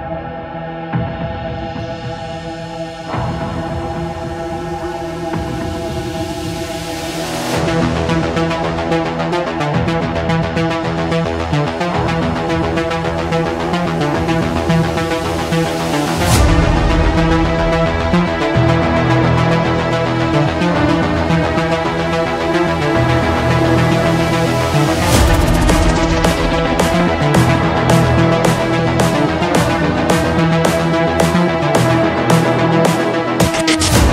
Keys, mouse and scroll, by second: 0.1 click, 2.0 click, 2.9 click, 4.2 click, 4.9 click, 6.6 click, 10.1 click, 12.0 click, 13.0 click, 13.8 typing, 14.3 Return, 18.1-20.2 drag, 24.4-25.8 typing, 26.5 Return, 29.3-30.3 drag, 31.0-33.9 drag, 33.9-34.1 typing.